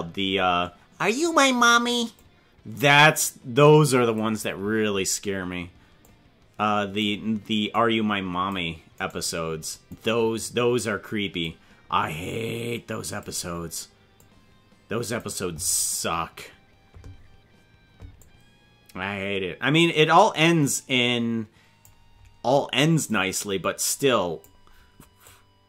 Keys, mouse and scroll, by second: 2.2-4.2 drag, 6.0-7.0 drag, 7.8 click, 9.1 right click, 9.9-11.4 drag, 12.2-13.2 drag, 14.2-15.2 drag, 18.2-21.8 drag, 23.2-24.4 drag, 25.2-25.6 drag.